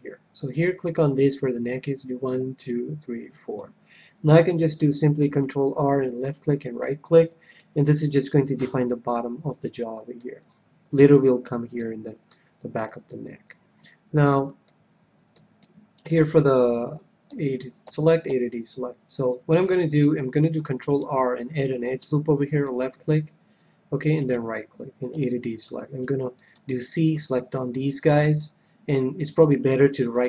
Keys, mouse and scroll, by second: 0.4-2.1 right drag, 1.5-3.2 drag, 5.2 ctrl+r, 6.6-8.3 right drag, 7.5-9.0 middle drag, 10.4-11.8 scroll up 1, 11.8 middle click, 12.8 KP_3, 13.5-14.7 middle drag, 15.5-17.5 middle drag, 17.2 a, 17.8 a, 18.3 a, 19.1 click, 19.5-21.5 middle drag, 21.0 ctrl+r, 24.2-26.0 right drag, 25.1 a, 26.0 c, 26.9-28.9 right drag, 28.1 c.